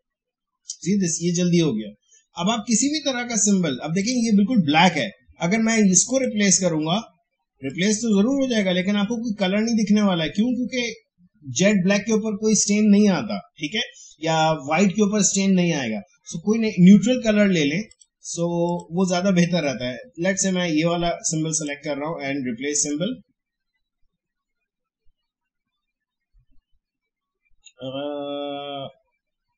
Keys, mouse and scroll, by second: 4.0 click, 17.8 click, 21.5 click.